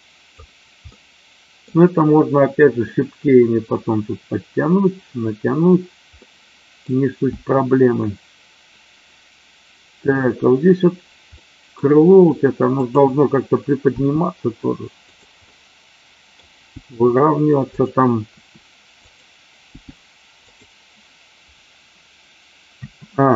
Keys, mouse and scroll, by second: 0.9-1.6 middle drag, 6.2 middle click, 11.4-11.7 middle drag, 13.9 g, 15.0 click, 15.4 middle click, 16.7 g, 17.7 click, 18.3 r, 19.0 click, 19.7 g, 22.8 a.